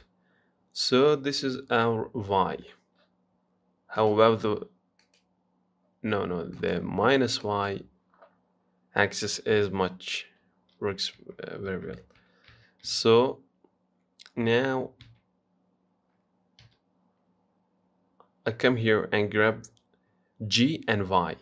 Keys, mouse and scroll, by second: 4.2-9.8 drag, 10.5 g.